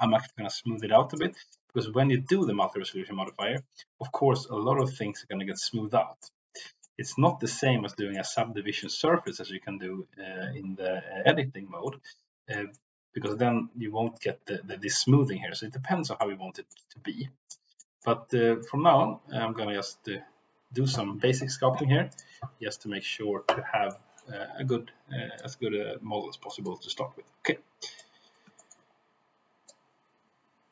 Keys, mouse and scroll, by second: 0.2 middle click, 0.8 click, 1.3 middle click, 2.2 shift+middle click, 2.6 middle click, 3.4 middle click, 4.8 middle click, 6.2 middle click, 6.8 shift+middle click, 7.2 middle click, 8.1 shift+middle click, 8.8 middle click, 11.8 middle click, 12.7 middle click, 16.2 middle click, 17.4 shift+middle click, 18.0 middle click, 22.0 click, 23.8 middle click, 25.4-26.5 drag, 27.7 click, 28.5 shift+middle click, 29.6-30.7 drag.